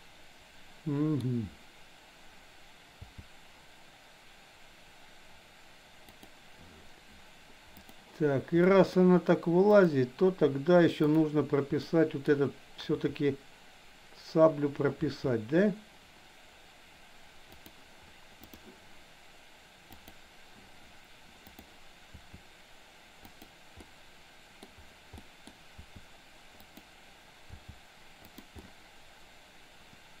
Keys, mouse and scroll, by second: 3.0 g, 7.8 click, 8.7 middle click, 9.7 click, 11.8 middle click, 12.9 r, 20.0 click, 21.4 click, 22.2 r, 23.8-24.7 middle drag, 25.2 middle drag, 25.7 r, 27.5 g, 28.7-30.2 middle drag.